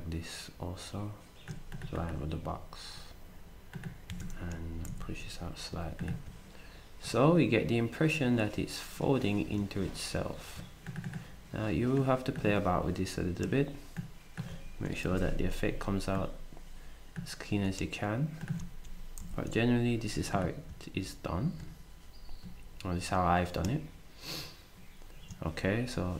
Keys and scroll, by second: 4.1 s, 4.9 Right, 15.2 alt+shift+Down, 19.2 alt+shift+Right.